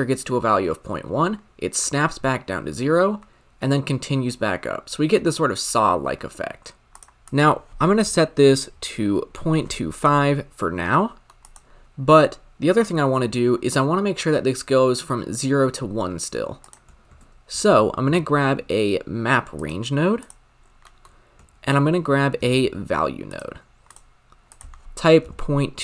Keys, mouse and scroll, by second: 10.9 middle click, 11.4 click, 13.7-15.1 scroll up 1, 15.1-16.6 scroll up 2, 16.6-19.6 drag, 19.6 shift+a, 20.6 scroll down 3, 20.9 middle click, 21.1-21.8 scroll up 4, 21.8 shift+a.